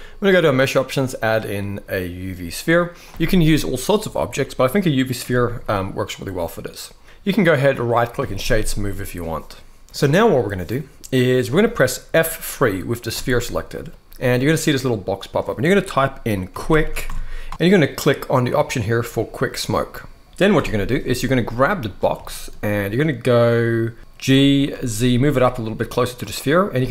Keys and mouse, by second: 4.9 KP_1, 7.5-8.2 right drag, 10.4-11.2 middle drag, 13.2 F3, 20.3 KP_1, 22.0 shift+middle click, 24.0 g, 24.4 z, 25.9-26.5 drag, 26.5 s.